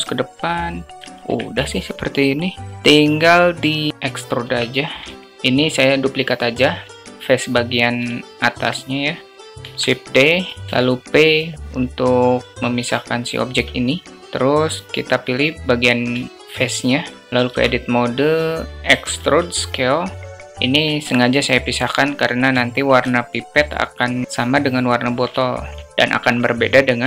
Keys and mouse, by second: 0.9 Tab, 1.0 alt+z, 4.3 Tab, 4.9 alt+z, 8.0 alt+click, 9.3 shift+3, 9.5 shift+d, 10.6 p, 12.6 Tab, 13.3 `, 16.1 alt+shift+drag, 17.3 Tab, 18.2 a, 18.8 e, 20.9 alt+shift+click, 22.5 alt+shift+click, 25.3 alt+shift+click.